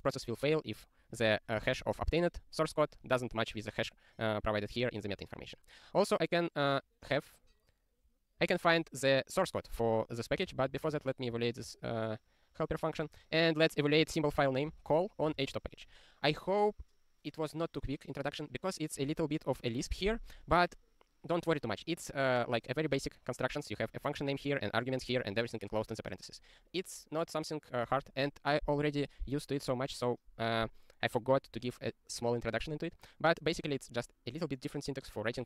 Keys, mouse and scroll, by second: 5.5 click, 8.4 click, 10.5 alt+shift+., 11.0 ctrl+e, 11.6 alt+<, 13.0 click, 15.3 ctrl+e, 23.8 click, 28.0 click.